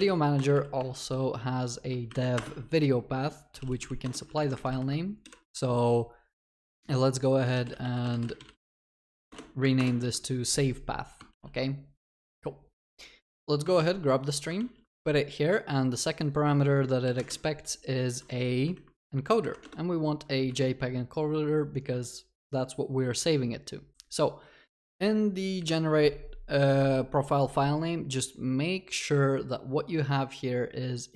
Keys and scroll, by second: 0.4 Return, 11.4 ctrl+s, 14.5 ctrl+c, 14.6 ctrl+v, 19.9 Return, 20.5 Escape, 25.6 ctrl+b.